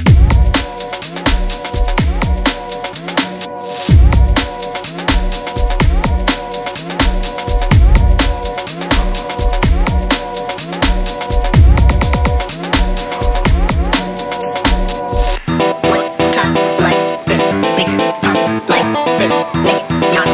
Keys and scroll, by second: 10.8 g.